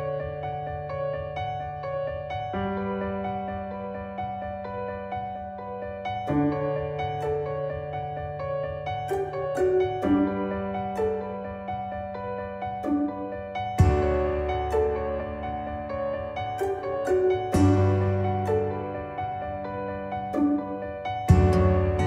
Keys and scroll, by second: 21.9 ctrl+z.